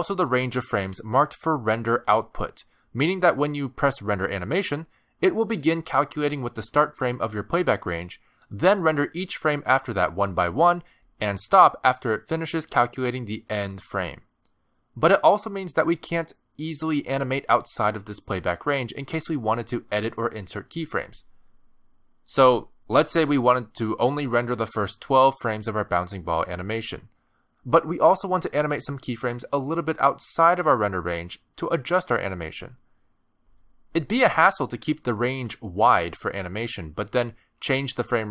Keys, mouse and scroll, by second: 2.7 space, 2.8 click, 3.3 r, 4.9 click, 5.4 click, 6.0 r, 6.6 space, 7.1 space, 7.7 click, 20.0 middle click, 20.6 space, 23.9 space, 25.5 click, 28.1 space, 30.0 space, 30.4 click, 33.8 click, 34.1 space, 37.3 space, 37.4 click.